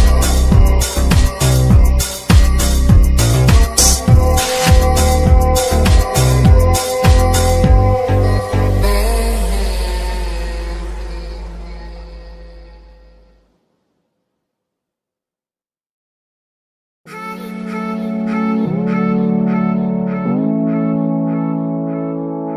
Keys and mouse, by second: 0.1 middle click, 1.2 shift+middle click, 1.7-2.6 middle drag, 5.9 click, 6.8 drag, 7.2 shift+a, 9.5 typing, 15.1 shift+a, 21.1 click, 21.7 click, 22.3 shift+a.